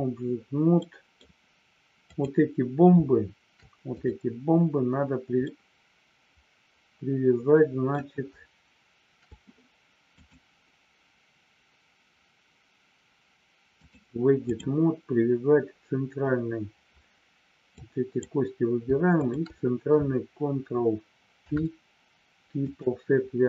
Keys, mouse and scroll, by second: 0.8 middle click, 2.0 click, 3.9 click, 5.5-7.9 middle drag, 10.1 click, 13.8-14.8 drag, 17.8 click, 19.1 shift+click, 21.4 ctrl+p.